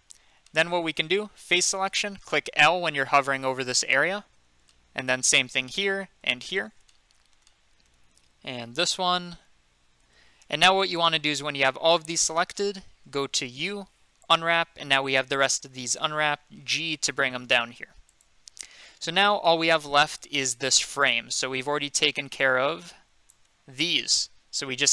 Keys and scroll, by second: 1.5 3, 4.4 i, 5.6 i, 6.2 i, 8.5 l, 10.0 l, 13.6 u, 16.6 g.